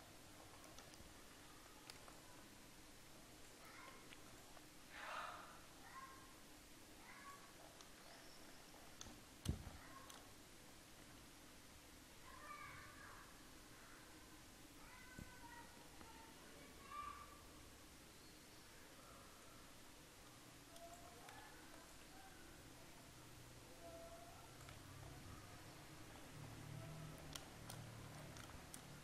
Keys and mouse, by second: 0.8 middle click, 0.9 Tab, 1.9 ctrl+r, 4.0 ctrl+r, 9.1 Tab, 9.1-11.9 drag, 10.8 Tab, 11.9 middle click, 12.2 ctrl+r, 21.5 ctrl+r, 24.9 Tab.